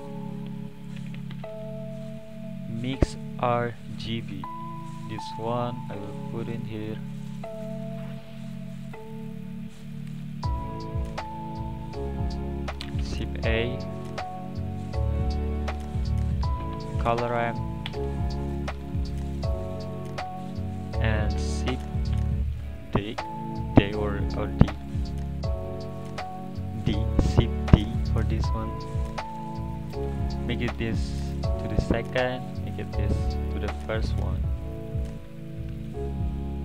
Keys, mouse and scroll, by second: 5.3-7.1 scroll up 4, 7.1-8.0 drag, 8.0-8.8 middle drag, 8.8-10.1 drag, 10.9 click, 12.0 click, 13.5 shift+a, 20.8 click, 22.1 shift+d, 24.9-29.3 drag, 29.3-30.0 scroll up 4, 31.2-32.8 drag, 34.5-35.0 scroll down 1, 35.0-35.4 middle drag, 35.4-35.8 scroll down 2, 35.8-36.6 middle drag.